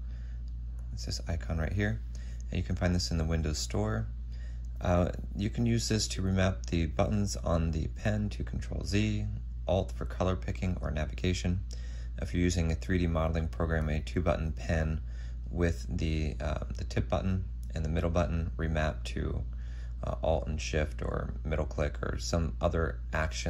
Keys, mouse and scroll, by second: 1.0 double click.